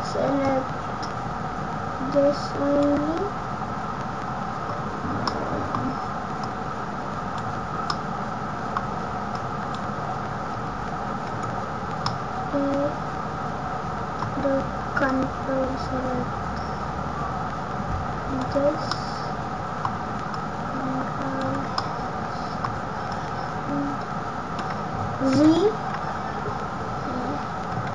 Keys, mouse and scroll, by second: 4.7 scroll down 7, 4.9-5.4 scroll up 2, 5.2 middle click, 5.7 scroll down 1, 12.0 middle click.